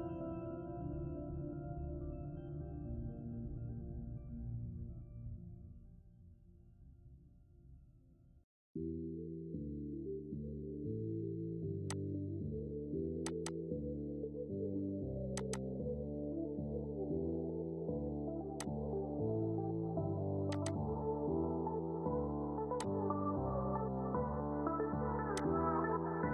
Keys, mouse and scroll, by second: 2.8 shift+middle click, 3.8 ctrl+z, 9.3 ctrl+z, 11.1 click, 17.9 click, 22.9 scroll up 1, 24.6 click.